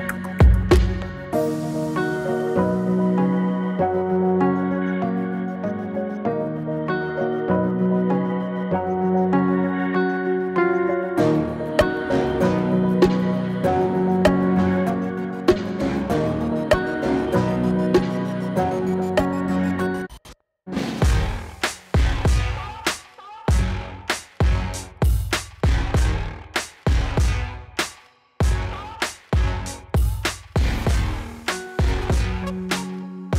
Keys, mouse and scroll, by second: 2.3-7.3 drag, 17.9-25.8 drag, 31.8 space.